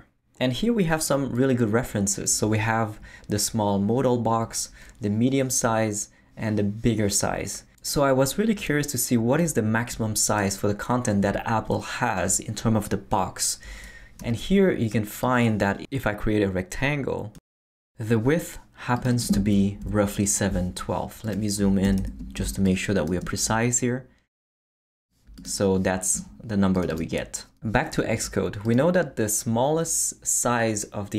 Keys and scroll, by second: 14.2 r, 19.8 Down, 21.8 super+=, 22.4 super+space, 23.3 space.